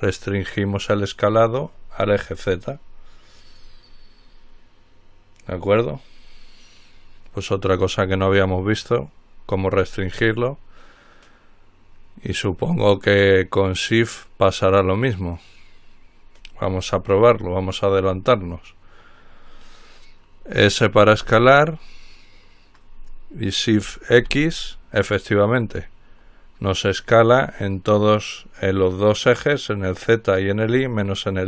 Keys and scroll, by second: 0.0-0.4 typing, 21.4 s, 24.5 x.